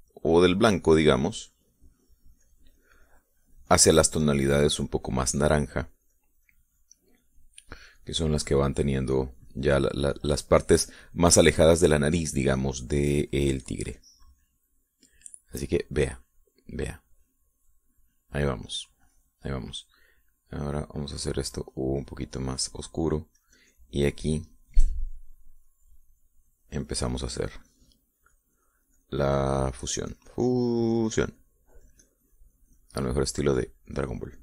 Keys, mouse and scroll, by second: 5.1-15.9 drag, 16.0-19.6 middle drag, 19.8 middle click, 21.2-22.2 drag, 22.8 click, 24.5-31.2 drag.